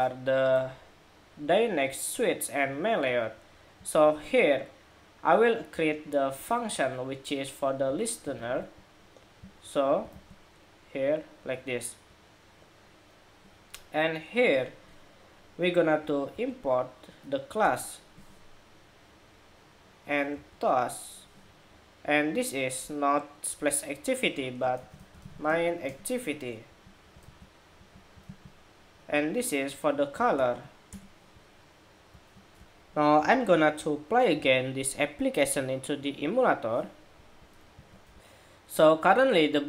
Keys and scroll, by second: 7.9 super+c, 8.2 super+c, 9.9 super+v, 16.0 alt+Return, 20.2 alt+Return, 26.9 super+c, 28.0 super+v, 30.1 alt+Return, 32.3 shift+super+2, 37.8 shift+super+2.